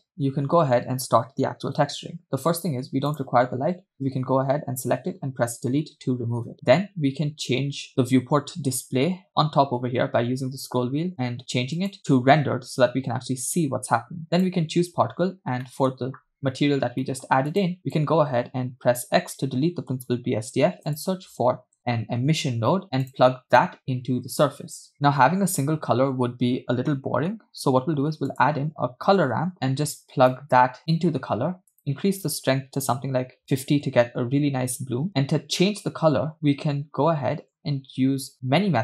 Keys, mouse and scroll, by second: 3.1 click, 5.5 Delete, 8.0 scroll down 4, 8.7 scroll down 1, 8.9-9.2 scroll down 1, 9.8 scroll up 1, 10.3 scroll down 1, 12.0 click, 14.4 click, 15.7 middle click, 15.9-17.0 scroll up 4, 17.1-17.4 middle drag, 17.6 drag, 17.9 click, 19.3 x, 20.6 shift+a, 22.2 i, 23.6 click, 24.1-24.8 drag, 24.9 click, 26.9 middle click, 28.1 shift+a, 30.3-31.2 drag, 31.7-33.8 drag, 35.1 middle click.